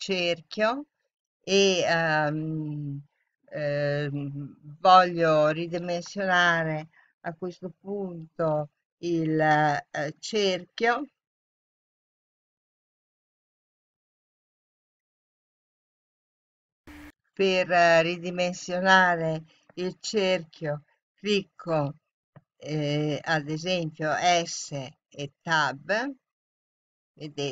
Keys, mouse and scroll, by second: 23.2 s.